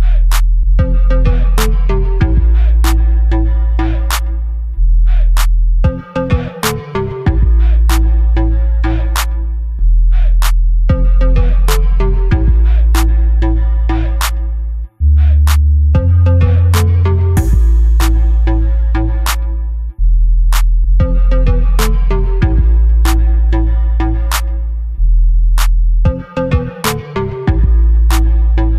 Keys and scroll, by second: 0.1 ctrl+shift+z, 7.8 ctrl+KP_0, 14.2-14.6 [, 14.7 [, 14.9 [, 15.3 [, 17.8 ], 19.0 [.